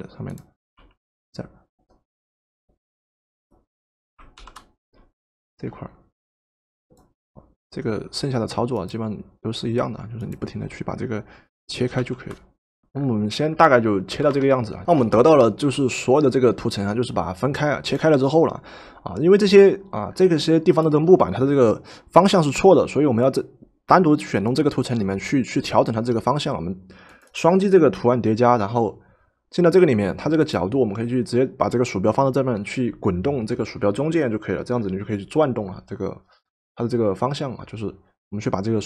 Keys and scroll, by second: 0.8 w, 14.1 ctrl+shift+v.